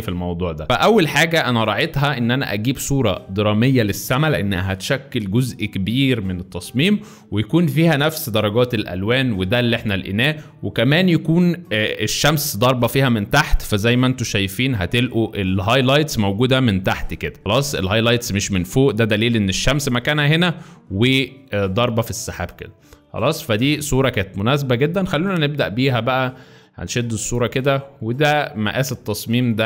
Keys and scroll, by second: 2.6 Left, 14.4 F3.